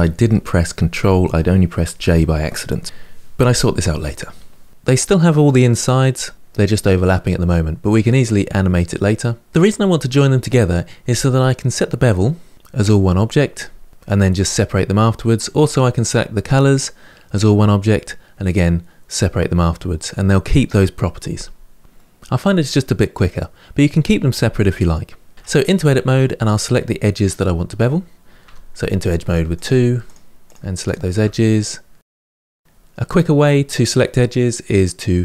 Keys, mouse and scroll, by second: 7.8-9.5 middle drag, 25.3 Tab, 25.5 middle click, 26.2-27.0 scroll up 2, 27.0 click, 28.2 2, 29.3 click, 29.8 shift+click, 30.2 shift+click, 30.6 shift+click, 31.0-33.4 middle drag.